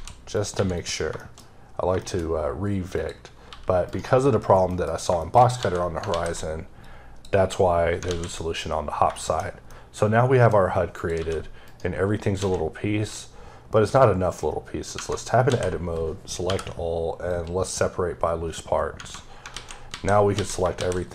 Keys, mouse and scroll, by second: 0.2 click, 0.4 x, 0.6 click, 1.0 shift+middle click, 1.3-1.7 scroll up 3, 1.8 shift+middle click, 2.0-2.8 scroll up 4, 2.8 click, 3.3 g, 3.7 right click, 4.1-4.5 scroll down 3, 4.5 middle click, 5.4 a, 6.7 click, 7.9 a, 9.0 shift+middle click, 9.2 scroll down 1, 9.5 middle click, 10.8 click, 11.0 g, 11.5 right click, 12.2 a, 17.1 click, 18.5 scroll up 1, 18.8 Right, 20.4 typing.